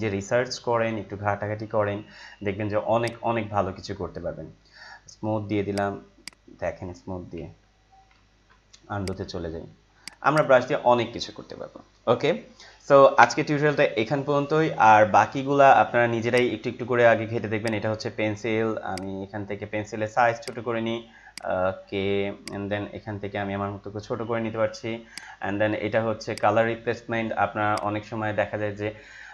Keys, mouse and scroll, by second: 3.0 click, 5.7-7.3 drag, 7.3 ctrl+z, 8.1 ctrl+alt+z, 9.0 click, 16.3 right click, 17.6-25.1 drag, 25.1 right click, 26.2-29.3 drag.